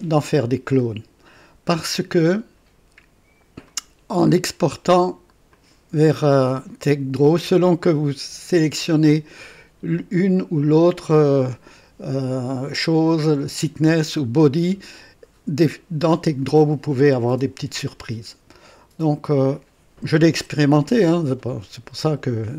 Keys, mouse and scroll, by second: 3.8 click, 5.5 click, 9.1 click, 19.3 click.